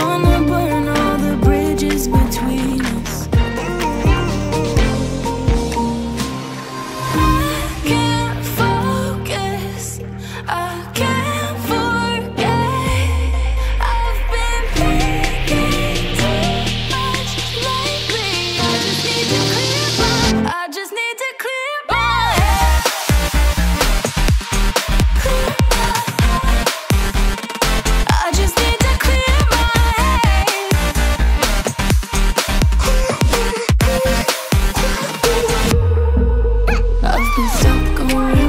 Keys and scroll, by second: 12.7 Down, 13.3 Down, 13.7 Up, 23.3 Down, 23.8 Up, 24.6 Up, 25.3 Up, 25.9 Down, 26.5 Down, 27.2 Down, 27.2 Up, 27.9 Down, 29.0 Up.